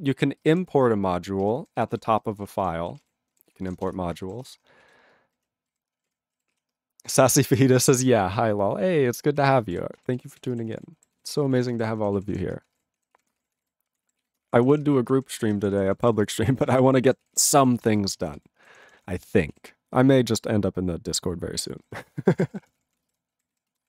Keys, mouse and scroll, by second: 0.5 ctrl+space, 0.5 ctrl+e, 1.4 ctrl+g, 1.8 ctrl+s, 1.9 ctrl+a, 2.0 ctrl+space, 2.1 ctrl+n, 2.2 ctrl+n, 2.5 ctrl+p, 2.6 ctrl+p, 2.9 ctrl+p, 3.0 ctrl+g, 3.5 ctrl+s, 4.0 Return, 4.5 Return, 4.8 ctrl+a, 5.3 ctrl+n, 5.7 ctrl+g, 6.0 ctrl+p, 6.1 ctrl+e, 6.6 ctrl+s, 9.5 ctrl+a, 9.6 ctrl+space, 9.6 ctrl+e, 9.7 ctrl+g, 10.2 ctrl+s, 10.3 ctrl+a, 10.4 ctrl+space, 10.5 ctrl+e, 10.5 ctrl+n, 10.7 ctrl+e, 10.8 ctrl+g, 11.2 ctrl+s, 11.3 ctrl+p, 11.3 ctrl+a, 11.5 ctrl+space, 11.5 ctrl+e, 11.6 ctrl+n, 11.7 ctrl+e, 11.8 ctrl+g, 12.2 ctrl+s, 12.3 ctrl+a, 12.4 ctrl+space, 12.5 ctrl+n, 12.7 ctrl+e, 12.7 ctrl+g, 13.2 ctrl+s, 13.2 ctrl+p, 13.3 ctrl+space, 13.4 ctrl+e, 13.6 ctrl+e, 13.6 ctrl+g, 13.9 ctrl+n, 14.2 ctrl+s, 14.3 ctrl+n, 14.4 ctrl+space, 14.5 ctrl+p, 14.6 ctrl+p, 14.7 ctrl+p, 14.8 ctrl+g, 15.0 ctrl+space, 15.1 ctrl+n, 15.2 ctrl+n, 15.3 ctrl+n, 15.4 ctrl+g, 15.5 ctrl+space, 15.6 ctrl+p, 15.7 ctrl+p, 16.0 ctrl+g, 16.1 ctrl+space, 16.1 ctrl+n, 16.2 ctrl+n, 16.3 ctrl+n, 16.5 ctrl+g, 16.6 ctrl+p, 16.6 ctrl+space, 16.7 ctrl+p, 16.9 ctrl+p, 17.2 ctrl+s, 17.3 ctrl+g, 17.8 ctrl+s, 18.0 ctrl+space, 18.1 ctrl+n, 18.2 ctrl+n, 18.5 ctrl+g, 18.7 ctrl+space, 18.7 ctrl+p, 18.8 ctrl+p, 19.1 ctrl+g, 19.5 ctrl+s, 21.7 ctrl+space, 21.8 ctrl+n, 21.9 ctrl+n, 22.0 ctrl+n, 22.2 ctrl+g, 22.5 ctrl+s, 22.6 ctrl+p, 22.8 ctrl+p, 22.9 ctrl+p, 23.0 ctrl+space, 23.0 ctrl+e, 23.1 ctrl+g, 23.5 ctrl+s, 23.7 ctrl+a, 23.8 ctrl+space.